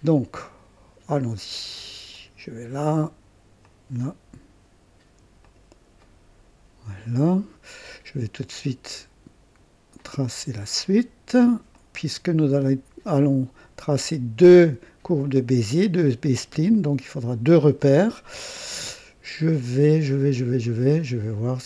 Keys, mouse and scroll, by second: 0.1 click, 2.1 click, 3.6 click, 5.4 click, 6.0 right click, 9.9 click, 11.7 click, 15.2 click, 16.1 right click, 16.7 right click, 20.9 right click.